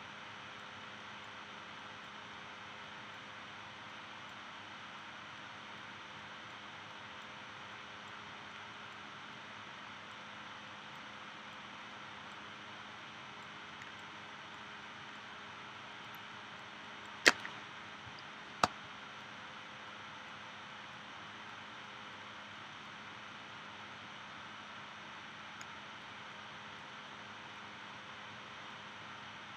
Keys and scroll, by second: 18.6 space.